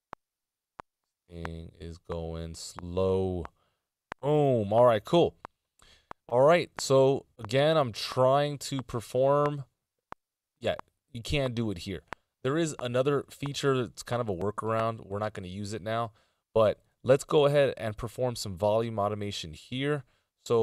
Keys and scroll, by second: 8.6 a.